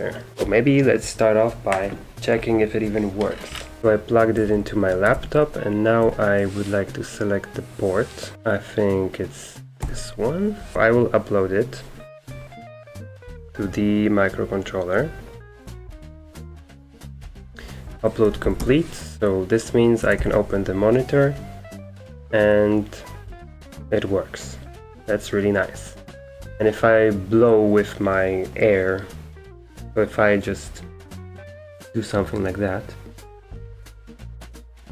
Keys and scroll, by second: 3.8 super+Return, 4.4 super+q, 5.1-6.0 typing, 9.8 Return, 10.5-11.2 typing, 18.2-20.6 typing, 22.5-23.3 typing.